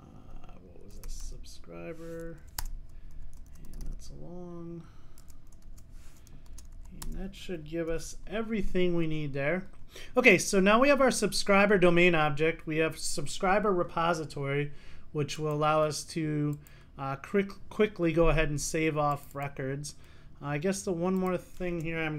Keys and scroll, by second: 2.6 Return, 8.0 Return, 10.4 super+s.